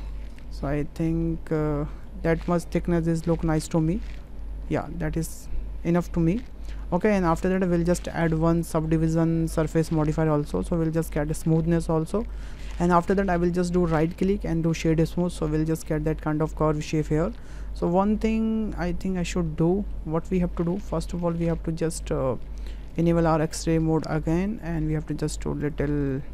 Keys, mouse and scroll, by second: 6.7 middle drag, 8.7-10.0 drag, 10.5-11.1 ctrl+middle drag, 11.3-12.2 middle drag, 13.9-15.5 drag, 15.5-15.8 middle drag, 16.3-17.1 middle drag, 17.7 `, 19.1-19.9 ctrl+middle drag, 21.5 Tab, 24.1 click, 24.8 s, 26.1 click.